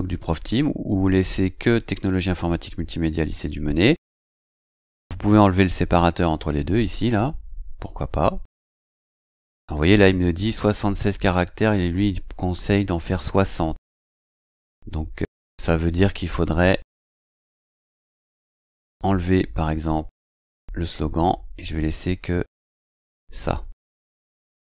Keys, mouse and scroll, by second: 6.7 click, 8.6 click, 10.6-11.4 drag, 11.8 click, 12.7-13.4 drag, 18.6 click, 20.1 click, 22.3-23.9 drag.